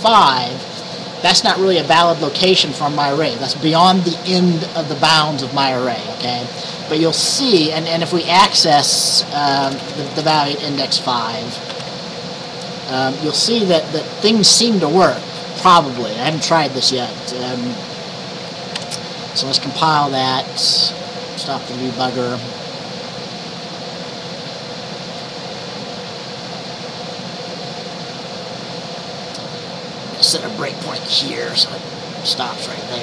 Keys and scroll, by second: 9.5 Right, 9.7 BackSpace, 9.9 BackSpace, 10.2 BackSpace, 11.8 ctrl+s, 18.9 ctrl+b.